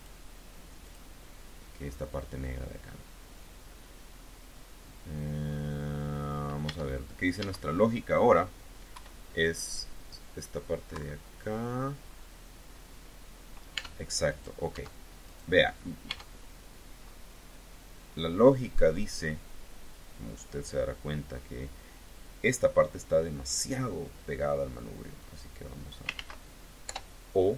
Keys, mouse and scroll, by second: 0.6 click, 2.7 click, 3.4-5.9 middle drag, 5.9 click, 6.5 Tab, 7.2 Tab, 8.8 KP_1, 10.8 KP_3, 13.6 Tab, 14.2 click, 14.6 Tab, 15.1 click, 15.9 Tab, 16.9-17.3 scroll up 1, 20.7 scroll up 1, 25.0 click, 26.0 ctrl+z, 26.7 o, 27.4-27.5 drag.